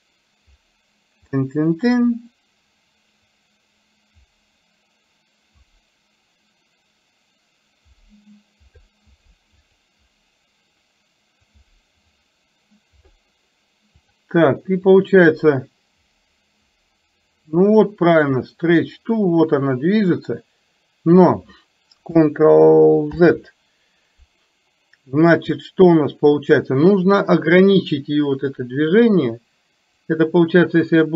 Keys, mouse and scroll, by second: 3.4-8.8 drag, 11.6-13.1 drag, 14.1 click, 15.1-21.4 drag, 30.1 click, 30.4-31.1 drag.